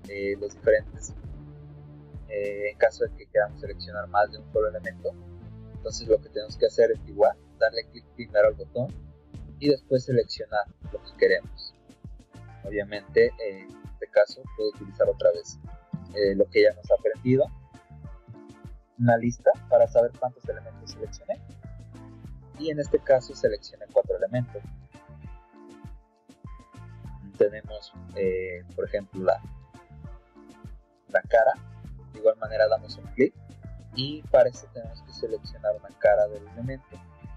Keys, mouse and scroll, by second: 0.5 click, 1.4 click, 3.3 middle click, 3.7 middle click, 5.4 click, 7.4 middle click, 7.5 middle click, 8.8 click, 11.5 click, 14.3 right click, 19.9 click, 20.9 click, 22.1 click, 23.1 click, 28.9 click, 30.3-31.4 drag, 32.1 click, 34.0 middle click, 35.7 click.